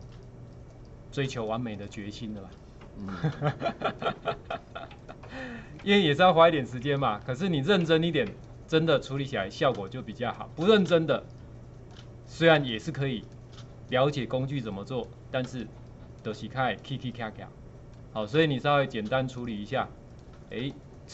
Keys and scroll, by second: 9.8 space, 10.8 space, 12.5 space.